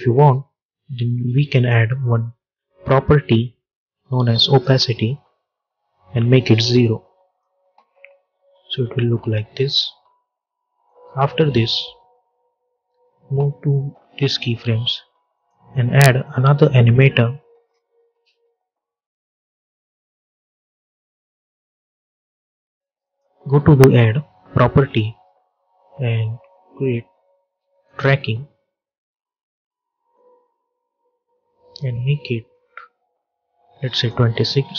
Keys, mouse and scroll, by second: 1.4 click, 4.4 click, 6.7 click, 7.5 space, 10.7-12.7 drag, 12.7 j, 15.2 click, 19.6 click, 22.9 click, 27.7 click, 28.9-30.0 scroll down 1, 30.0-34.7 drag.